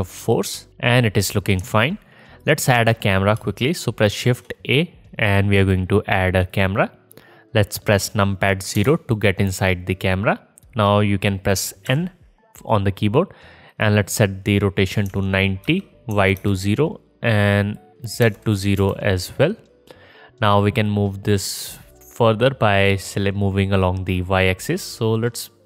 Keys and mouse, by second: 4.2 shift+a, 8.8 KP_0, 11.9 n, 22.0 middle click.